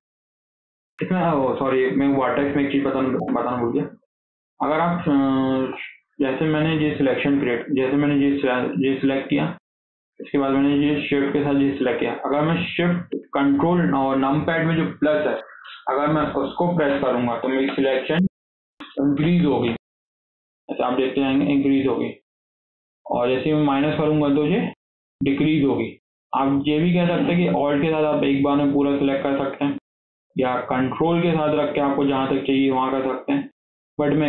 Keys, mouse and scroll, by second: 0.7 scroll up 2, 1.0-2.2 shift+middle drag, 2.2 1, 2.5 middle click, 3.0 KP_1, 3.6 scroll up 4, 3.8 shift+middle click, 4.1 scroll down 1, 4.2-5.6 shift+middle drag, 5.6 scroll down 2, 5.8-6.9 shift+middle drag, 6.9 KP_1, 7.5 scroll up 2, 8.2 click, 8.6 scroll up 1, 8.8-11.0 shift+middle drag, 11.0 shift+click, 16.8 ctrl+shift+KP_Add, 17.5 ctrl+shift+KP_Add, 19.1 ctrl+shift+KP_Add, 19.5 ctrl+shift+KP_Add, 20.6 scroll down 1, 20.8 middle click, 21.3 scroll down 1, 21.4 middle click, 22.3 ctrl+shift+KP_Add, 22.5 ctrl+shift+KP_Add, 23.7 ctrl+shift+KP_Add, 23.7 ctrl+shift+KP_Subtract, 23.9 ctrl+shift+KP_Subtract, 24.1 ctrl+shift+KP_Subtract, 24.3 ctrl+shift+KP_Subtract, 24.5 ctrl+shift+KP_Subtract, 24.7 ctrl+shift+KP_Subtract, 25.0 ctrl+shift+KP_Subtract, 25.2 ctrl+shift+KP_Subtract, 26.7 middle click, 27.1-27.7 scroll up 1, 27.7 alt+click, 28.1 scroll down 3, 28.3 alt+z, 28.5 middle click, 29.4 alt+z, 29.5-31.2 middle drag, 31.2 click, 31.6-32.8 middle drag, 32.8 ctrl+click, 33.3-34.2 middle drag.